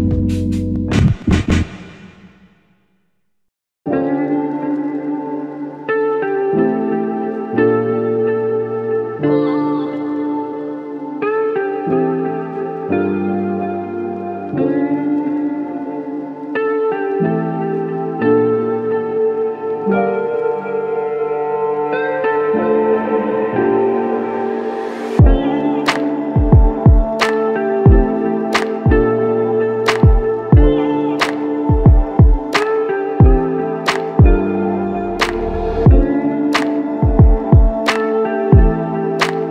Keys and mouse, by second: 3.3-3.6 typing, 12.2 shift+click, 19.0 typing, 19.5 Return, 23.6-24.3 typing, 27.1 double click, 31.4 double click.